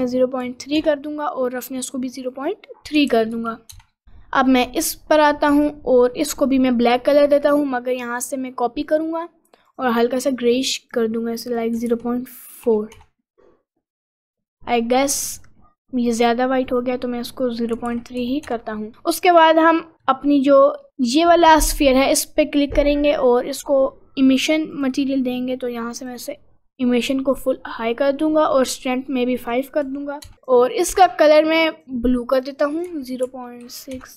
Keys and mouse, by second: 2.5-3.8 drag, 5.6-7.0 drag, 8.8 click, 9.7 click, 20.4 click, 24.7 click, 26.1 click, 29.6 click, 30.4 click.